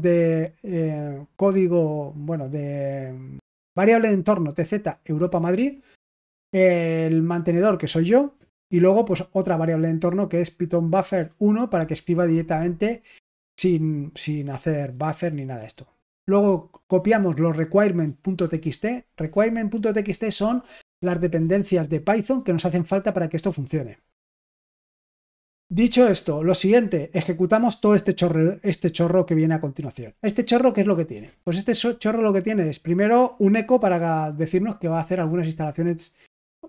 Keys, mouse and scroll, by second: 2.8 click, 3.3 click, 26.4-29.5 drag, 30.8 click, 33.2-34.7 drag.